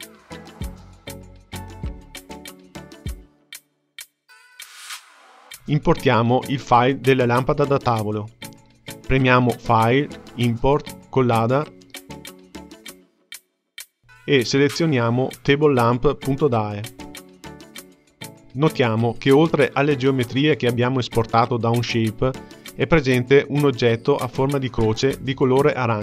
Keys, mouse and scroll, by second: 7.0-10.2 drag.